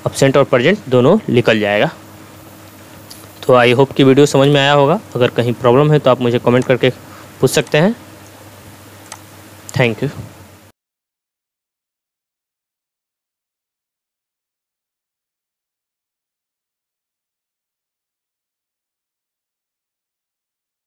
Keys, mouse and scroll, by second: 4.5 2, 6.6-8.5 drag.